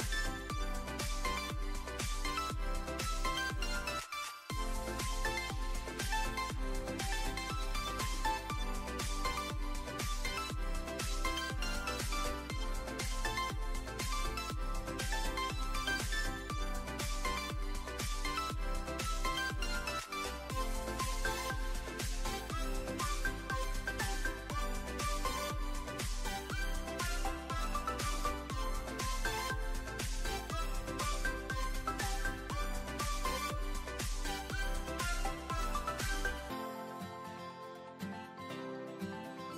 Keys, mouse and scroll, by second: 0.8 click, 3.7 middle click, 4.5 middle click, 5.1 click, 5.7 alt+middle click, 6.6 alt+middle click, 7.0 e, 7.2 s, 8.2 middle click, 9.6 s, 11.0 middle click, 11.5 middle click, 12.3 click, 13.4 alt+middle click, 14.3 click, 15.1 shift+click, 15.8 ctrl+z, 16.1 alt+middle click, 17.0 shift+click, 17.1 click, 17.6 middle click, 18.3 2, 18.9 click, 20.8 click, 22.3 shift+click, 22.7 alt+middle click, 23.6 click, 24.6 a, 25.7 click, 27.4 middle click, 28.1 f, 29.1 ctrl+f, 30.5 Tab, 31.9 ctrl+3, 32.4-33.3 middle drag, 33.9 Tab, 35.2 Tab, 35.8-36.9 middle drag, 37.8 \.